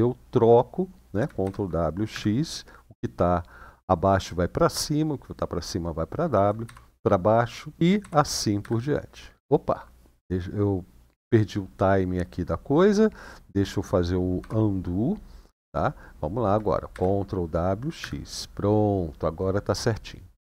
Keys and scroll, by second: 1.1 ctrl+w, 1.9 x, 6.4 ctrl+w, 7.8 ctrl+w, 8.3 x, 14.1 u, 16.7 ctrl+w, 17.8 x.